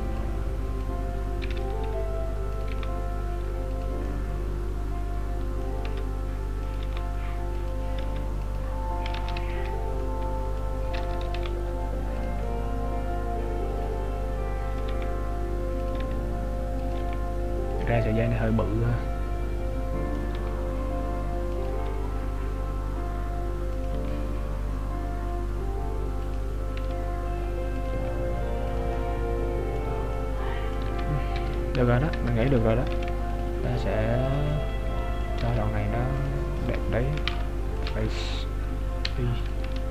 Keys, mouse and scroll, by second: 0.3 click, 1.6 r, 2.8 g, 4.1 middle click, 5.9 s, 9.4 ctrl+z, 10.0 middle click, 11.4 g, 12.5 middle click, 15.0 g, 18.1 middle click, 18.1 g, 20.4 g, 28.9 middle click, 31.0 Tab, 31.6 Tab, 31.6-32.0 scroll down 1, 32.0 scroll up 2, 32.2 Tab, 32.9 ctrl+r, 34.6 middle click, 35.5 ctrl+Tab, 36.6 right click, 37.0-37.4 scroll up 3, 37.2 ctrl+Tab, 38.2 right click, 39.1 i, 39.7 Tab.